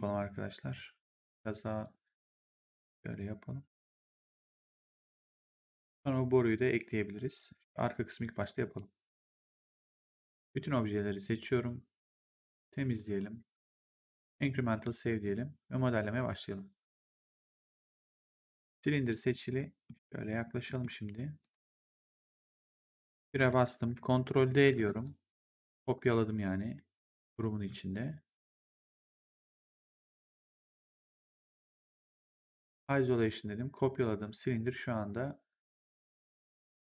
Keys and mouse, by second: 1.7 click, 2.6 middle click, 4.6 middle click, 8.3 click, 11.2 click, 12.5 click, 14.3 click, 17.0 click, 18.3 click, 19.4 middle click, 20.6 middle click, 21.3 click, 23.2 1, 24.5 ctrl+d, 27.2 click, 29.3 click, 32.6 click.